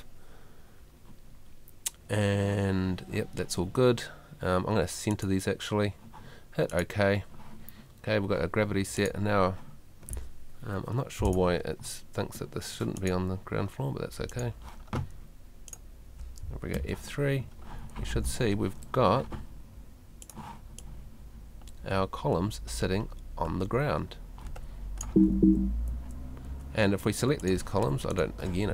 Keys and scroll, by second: 16.8 F3, 18.0 Escape, 25.0 Escape.